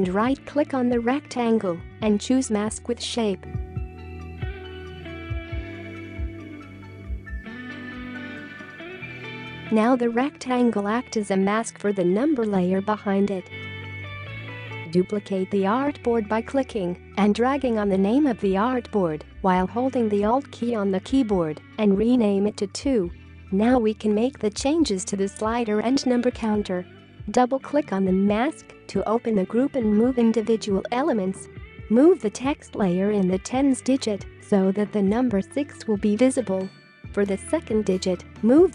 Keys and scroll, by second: 14.2 space, 19.4 2, 20.3 Return, 22.3 space.